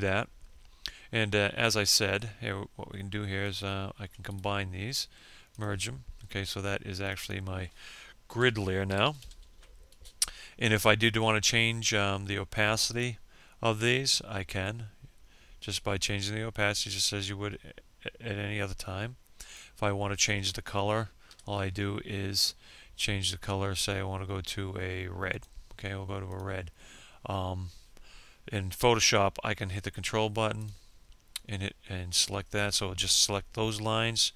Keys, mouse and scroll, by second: 1.0 ctrl+click, 1.8 right click, 3.0 click, 5.7-7.2 typing, 7.4 Return, 10.4-17.3 drag, 18.7 F6, 19.8 click, 27.9 ctrl+click, 33.6 F5.